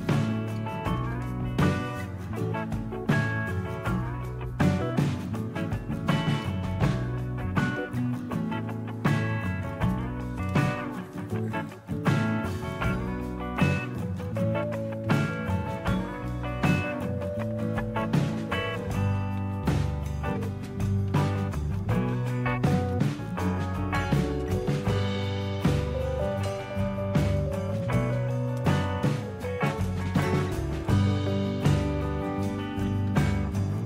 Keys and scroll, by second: 1.0 Return, 1.0 typing, 20.4-22.9 typing, 24.2-27.4 typing, 28.6-30.4 typing, 30.8 Return, 31.8-33.8 typing.